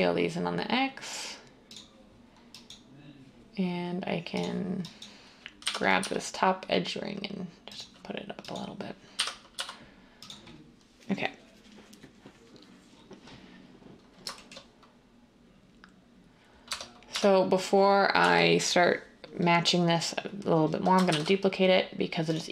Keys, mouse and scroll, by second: 5.6-5.9 typing, 9.1-9.5 typing, 16.6 Tab, 17.1 Tab, 18.1 l, 21.0 d.